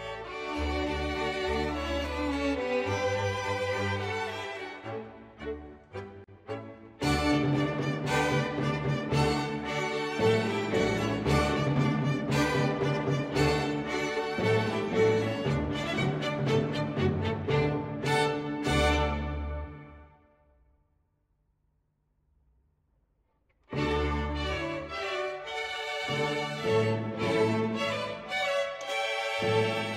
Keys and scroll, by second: 0.0 Page_Down, 0.2 ctrl+z, 0.4 Page_Down, 0.7 Page_Down, 0.8 Page_Down, 0.9 Page_Up, 1.1 Page_Down, 1.2 Page_Up, 1.5 Page_Down, 1.9 ctrl+z, 5.1 Page_Up, 5.1 Page_Down, 6.1 Page_Down, 6.5 Page_Up, 8.6 Page_Down, 10.5 Page_Down, 13.2 Page_Down, 16.2 Page_Up, 16.4 Page_Down, 16.7 Page_Up, 16.7 Page_Down, 18.4 ctrl+s, 20.7 ctrl+z, 20.9 Page_Up, 21.1 Page_Down, 21.3 Page_Up, 21.5 Page_Down, 21.7 Page_Down, 21.9 Page_Down, 22.2 Page_Up, 24.5 ctrl+z, 25.9 Page_Up, 26.1 Page_Down, 27.0 ctrl+z, 27.4 ctrl+z, 27.8 ctrl+z.